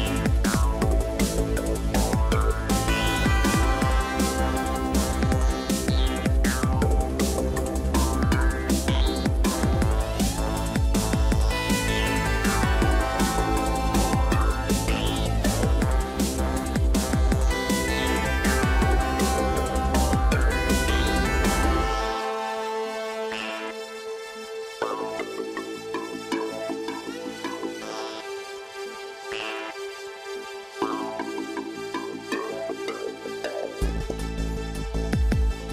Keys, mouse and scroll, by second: 11.0-11.5 scroll up 3, 11.5 scroll down 1, 12.5-13.4 scroll up 4, 15.7 ctrl+z, 20.7 ctrl+alt+shift+e.